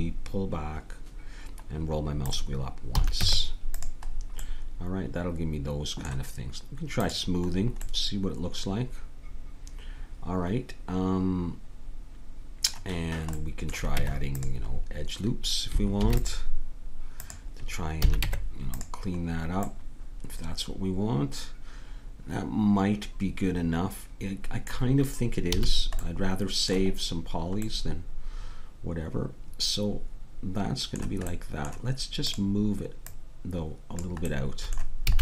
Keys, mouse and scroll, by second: 3.0 a, 3.2 Tab, 7.0-9.0 drag, 9.0 middle click, 13.4 middle click, 14.0 Tab, 16.0 ctrl+r, 18.0 a, 18.3 Tab, 25.5 a, 31.4 middle click, 32.3 right click, 33.0-35.1 drag, 34.3 right click.